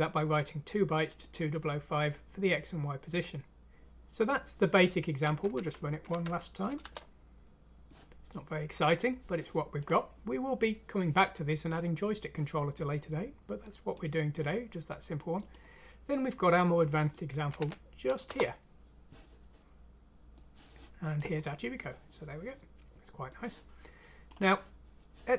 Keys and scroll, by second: 6.1 F6, 6.8 Return, 17.6 F6, 18.2 Return.